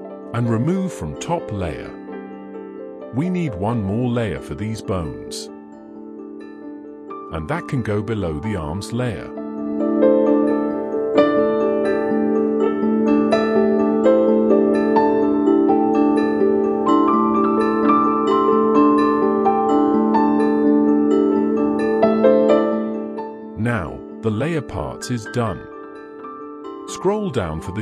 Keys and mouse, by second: 0.4 shift+middle drag, 1.0-1.4 middle drag, 1.7 alt+a, 2.4 shift+middle drag, 2.8-3.7 middle drag, 4.1 middle drag, 4.8 click, 5.1-5.5 middle drag, 6.4 shift+click, 6.7 shift+drag, 13.5 click, 15.1 click, 15.9 click, 16.5-20.3 drag, 18.1 c, 21.2 click, 22.7 click, 23.1 middle click, 23.7 alt+a, 24.2 drag.